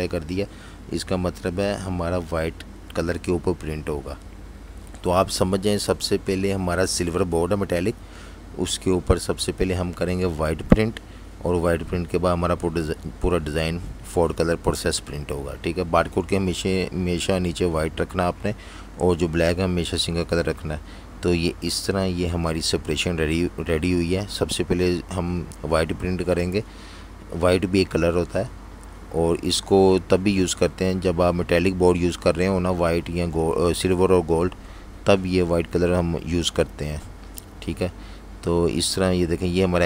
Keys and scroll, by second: 2.8 i, 4.1-6.5 typing, 13.5 v, 14.9 super+-, 15.6 super+0, 16.5 z, 17.0 v, 18.5 typing, 21.1 v, 27.6 super+-, 27.8 super+-, 28.6-29.8 typing, 31.6 v.